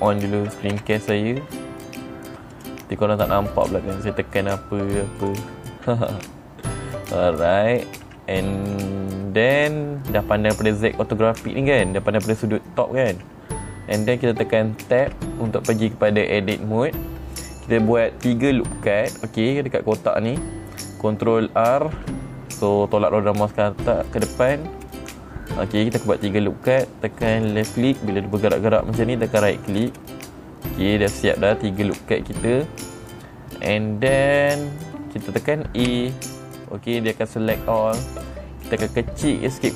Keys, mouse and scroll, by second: 3.0 click, 4.4 click, 5.7 click, 6.6 n, 15.6 Tab, 22.2 ctrl+r, 23.9-26.0 middle drag, 27.8 click, 29.8 right click, 30.2 middle click, 30.3-30.6 scroll up 5, 34.1 middle click, 34.2-34.5 scroll down 2, 36.4 a, 38.1 middle click, 39.1 middle click.